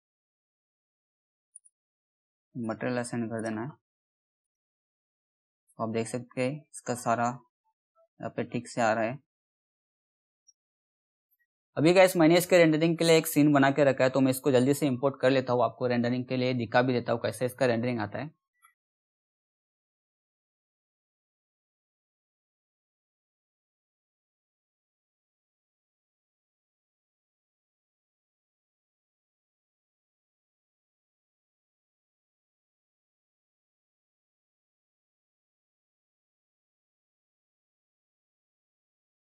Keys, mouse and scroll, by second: 1.0 click, 4.7-5.3 scroll up 1, 5.3-6.2 scroll down 1, 6.5 alt+middle click, 8.1-8.8 scroll down 1, 9.1-9.6 scroll down 1, 9.9 click, 20.5 click, 30.0 click, 30.9 click, 36.3 click, 36.5 scroll down 1, 37.3 click, 37.9 F3, 38.0 scroll up 2, 38.2 click, 38.6 click, 38.8 Delete, 39.0 scroll up 1, 39.1 click, 39.1 click.